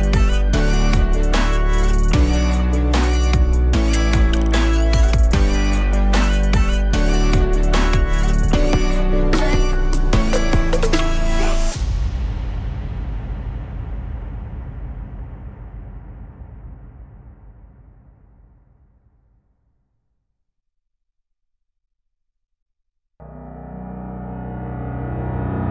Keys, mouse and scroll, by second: 0.7 click, 2.0 click, 3.5 Delete, 3.8 click, 4.1 shift+a, 5.4 s, 7.4-10.0 drag, 12.9 click, 14.2 click, 15.4 click, 16.5 click, 17.3-18.1 drag, 18.1-20.6 drag, 21.1 middle click, 21.6 click, 21.8 shift+a.